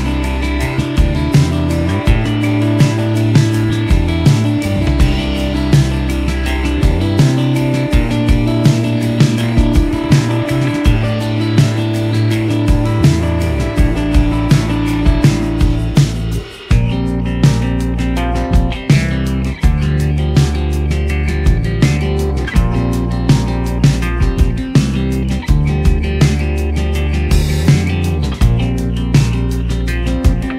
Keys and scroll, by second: 4.5 ctrl+j, 7.8-8.3 typing, 14.6 ctrl+z, 19.9 ctrl+z.